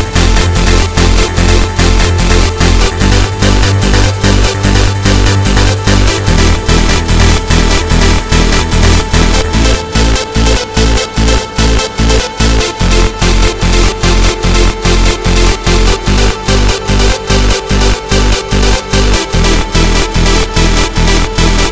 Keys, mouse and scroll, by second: 0.7 click, 2.2 click, 3.4 right click, 5.6 click, 10.3 click, 18.6 click, 20.8 click.